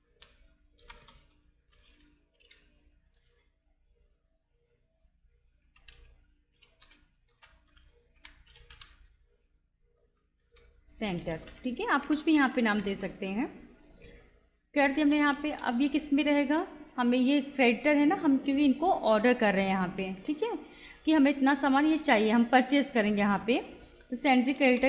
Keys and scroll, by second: 0.0-0.8 typing, 3.2 shift+a, 5.6-13.4 typing, 14.9 Return, 17.8 Down, 20.0 Up, 24.6 Return.